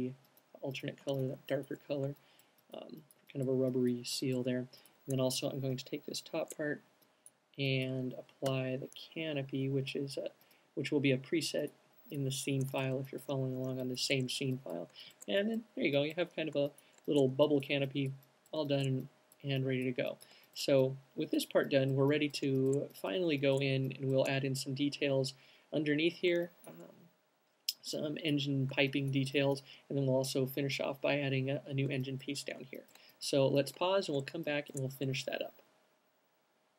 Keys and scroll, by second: 0.3 alt+q, 5.5 alt+shift+fn+Up, 8.8 m, 13.0 q, 15.0 alt+shift+q.